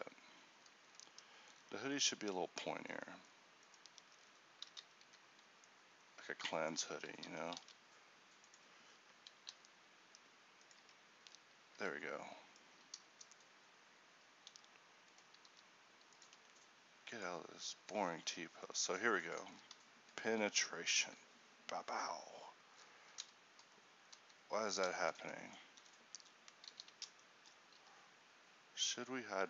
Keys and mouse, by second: 0.0 Escape, 4.1 Tab, 4.8 z, 5.1 a, 5.8 ctrl+e, 7.0 z, 7.3 g, 9.5 ctrl+b, 10.9 Tab, 11.9 a, 15.6 r, 16.3 g, 26.8 alt+g, 27.9 g.